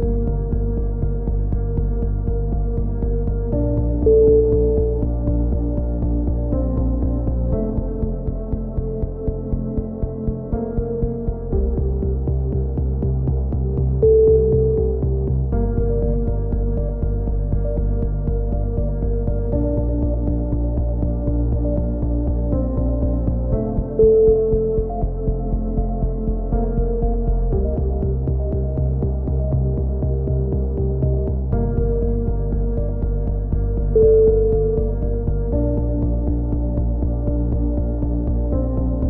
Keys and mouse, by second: 2.6 click, 4.9 c, 5.7 right click, 6.1 middle click, 6.4 click, 6.9 ctrl+z, 7.3-10.1 drag, 10.3-11.7 middle drag, 11.7 z, 12.0 z, 12.5 a, 12.9 click, 13.8 middle click, 14.2 click, 14.7 KP_7, 15.4 middle click, 16.3-17.4 drag, 17.4 a, 17.6 z, 18.1 Tab, 18.8-20.8 drag, 20.8 Tab, 20.8-21.9 middle drag, 22.9 right click, 23.4 KP_3, 23.6 click, 23.8 z, 24.2 click, 24.8 right click, 24.9-26.1 middle drag, 26.4 click, 27.0 z, 27.2 middle click, 28.2 click, 29.4 right click, 29.8 KP_3, 30.3 z, 31.4 c, 32.8 click, 33.9 middle click, 34.4 click, 36.1 right click, 37.1 click.